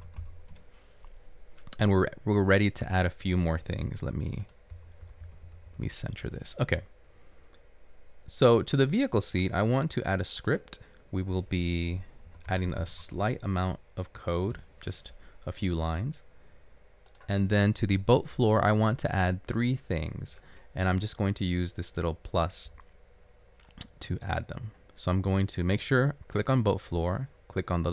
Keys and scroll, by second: 1.0-1.7 typing, 3.9 typing, 12.7-13.7 typing, 14.7 Return.